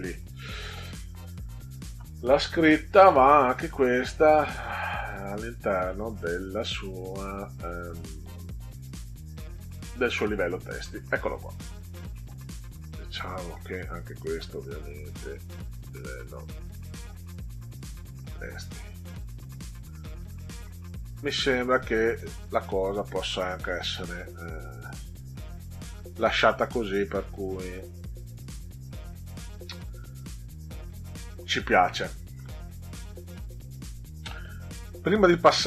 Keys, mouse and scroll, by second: 3.6 right click, 10.2 click, 12.1 middle click, 13.9 click, 14.3 right click, 18.2 click, 20.2 ctrl+scroll down 2, 21.3-22.1 middle drag, 33.3 click.